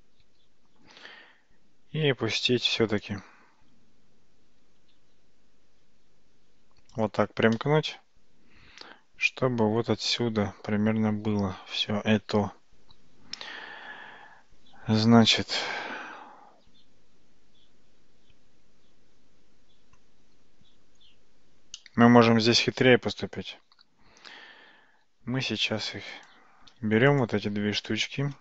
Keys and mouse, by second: 1.2 g, 4.5 g, 7.6-20.1 middle drag, 21.8-23.9 middle drag, 25.3 g, 27.1 click.